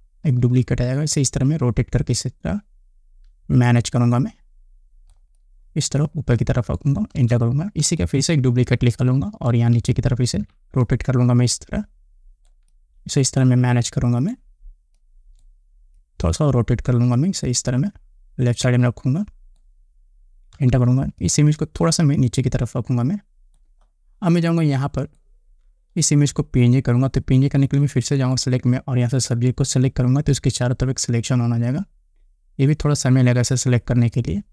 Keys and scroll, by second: 0.2 ctrl+t, 7.2 Return, 10.3 ctrl+t, 20.6 Return.